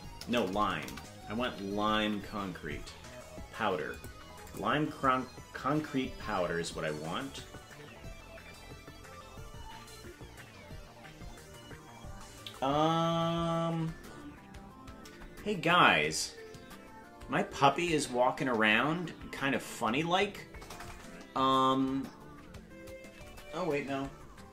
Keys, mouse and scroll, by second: 0.3 BackSpace, 0.5 BackSpace, 0.9 BackSpace, 4.5 click.